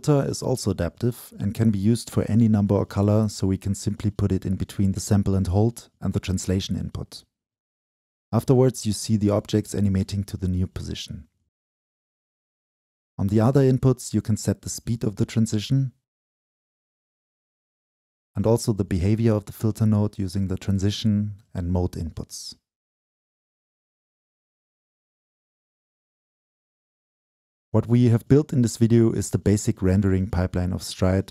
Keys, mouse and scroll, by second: 0.0 click, 0.2 middle click, 0.2-0.7 scroll down 2, 0.7-13.0 drag, 13.5-18.9 drag, 18.9-20.6 middle drag, 20.6-22.7 drag, 22.8-25.3 shift+drag, 25.3 middle click, 25.5-31.0 drag.